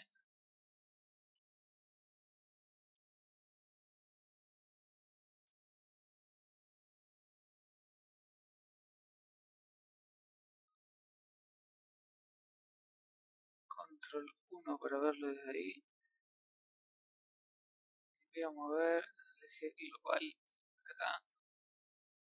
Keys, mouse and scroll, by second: 0.0-2.9 middle drag, 2.9 KP_1, 3.3 KP_3, 4.2 KP_1, 5.4 KP_Decimal, 6.3 KP_1, 7.1 KP_3, 9.8 scroll down 10, 10.2 scroll up 2, 11.0 KP_1, 13.7 scroll up 4, 14.2 middle click, 15.0 scroll up 5, 15.9 scroll up 2, 15.9-19.5 middle drag, 19.5-20.5 drag, 21.8-22.2 middle drag.